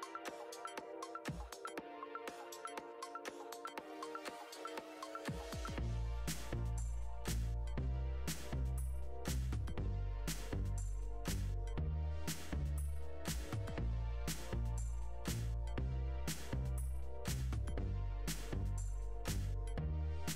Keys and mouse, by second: 2.6 g, 8.2 right click, 10.1 Tab, 11.3 click, 12.3 Delete, 13.9 click, 16.3 click, 17.9 shift+d, 18.7 click.